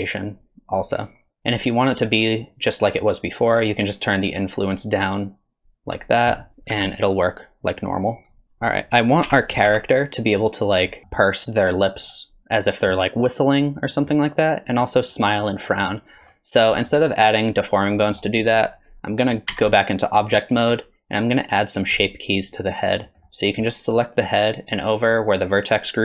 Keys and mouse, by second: 4.4 click, 5.4 click, 6.7 g, 9.3 r, 11.1 click, 13.9 click, 15.7 click, 16.8 click, 18.0 click, 19.5 ctrl+Tab, 23.0 click.